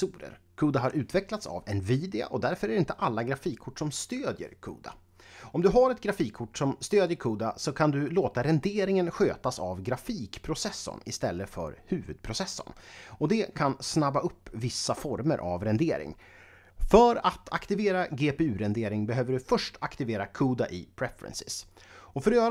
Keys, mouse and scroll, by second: 4.0 click, 5.7 click, 7.7 click.